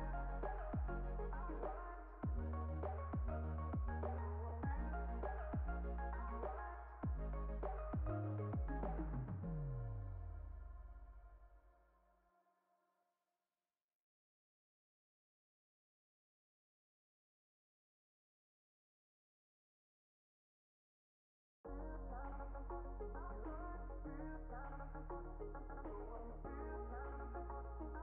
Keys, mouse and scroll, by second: 0.2 click, 0.9 click, 2.6-4.6 drag, 4.6 shift+a, 5.1 s, 5.8 click, 7.3 click, 8.6 right click, 10.9 click, 12.1 click, 13.7 drag, 15.3-17.8 drag, 17.9-20.7 drag, 21.3 click, 22.7 click, 26.5 click.